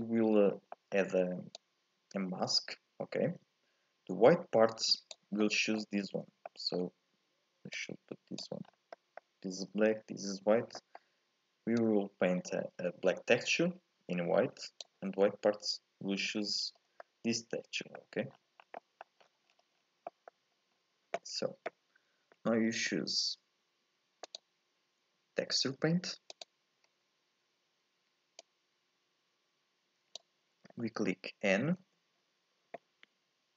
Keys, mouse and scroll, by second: 0.5 scroll down 2, 0.8 middle click, 1.6 click, 5.4-7.7 middle drag, 7.7 click, 8.7 scroll up 4, 9.0-11.8 middle drag, 11.8 click, 17.0-18.3 middle drag, 18.3-18.8 scroll down 5, 18.8 middle click, 19.3-20.1 scroll down 11, 20.1 middle click, 20.6 scroll up 1, 20.8-23.7 scroll down 1, 23.7 scroll down 1, 24.3-27.3 drag, 28.4-31.4 drag, 31.8 n.